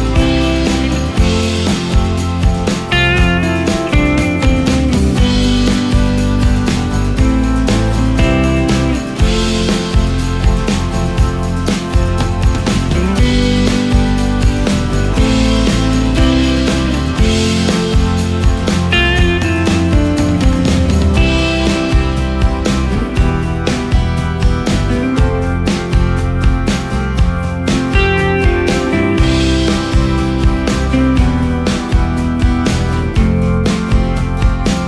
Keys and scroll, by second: 1.6 ctrl+space, 4.1 space, 8.8 ctrl+space, 9.5 ctrl+space, 20.5 ctrl+space, 22.3 ctrl+space, 27.2 space, 30.5 ctrl+space, 31.0 ctrl+space, 31.6 ctrl+alt+space.